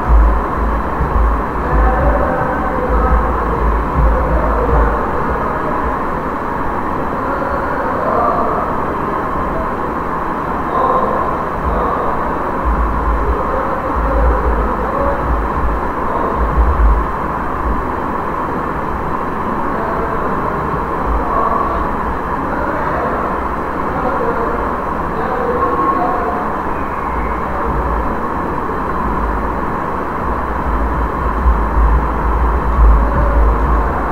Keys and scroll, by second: 0.0-4.9 typing, 13.4-17.9 typing, 20.5 ctrl+a, 26.8-28.7 typing, 30.2-34.1 typing.